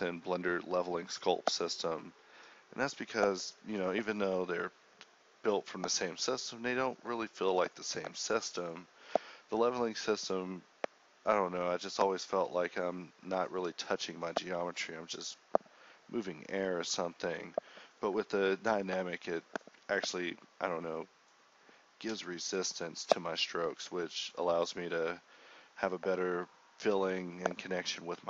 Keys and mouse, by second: 0.8 click, 2.0-3.9 drag, 4.3-5.0 drag, 8.1 ctrl+z, 8.8 ctrl+z, 15.4-17.2 drag, 17.6-19.5 drag, 20.9 [, 21.1 [, 24.1 drag, 24.7-25.1 [, 26.8 ].